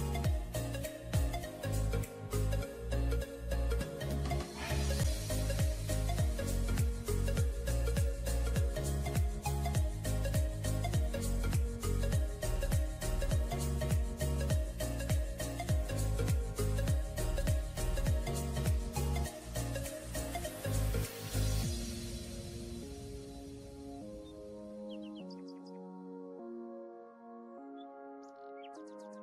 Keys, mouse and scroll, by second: 1.3 typing, 3.0 scroll up 1, 3.4 typing, 6.0 double click, 8.2 alt+scroll down 1, 9.8 alt+scroll up 1, 9.9 scroll down 1, 10.1 alt+scroll up 1, 10.7 alt+scroll up 1, 12.1-12.5 ], 12.7 ], 14.5 double click, 15.8 scroll down 1, 16.8 scroll up 1, 18.7 double click, 20.7 ], 20.9 ], 21.0 ], 21.3 ], 22.3 double click, 27.2-28.8 scroll down 1, 28.8 double click.